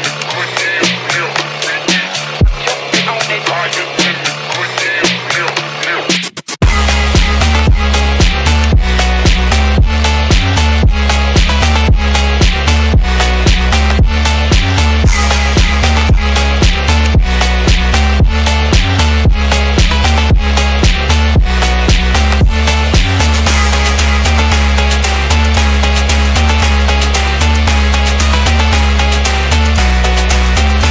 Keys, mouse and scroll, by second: 0.9 click, 2.4-4.1 middle drag, 4.7 click, 5.3 m, 5.8-6.1 scroll up 3, 6.2-6.5 shift+middle drag, 7.4 click, 7.7 m, 8.4 click, 8.6 click, 9.0 click, 9.8 click, 10.0 click, 10.4 click, 10.6 click, 11.4 click, 11.7 m, 12.3 click, 12.7-13.5 middle drag, 13.8 click, 14.2 m, 14.9-16.3 shift+drag, 16.6-16.9 shift+middle drag, 17.0-18.0 middle drag, 19.4-20.8 drag, 21.3-22.4 shift+drag, 22.9-24.0 shift+drag, 24.6-25.0 drag, 25.2 scroll down 3, 25.4-25.8 middle drag, 25.9 scroll up 3, 26.9-28.2 shift+drag, 28.6-29.0 shift+middle drag, 29.3-29.6 middle drag, 29.8 shift+middle click, 30.6 scroll down 2.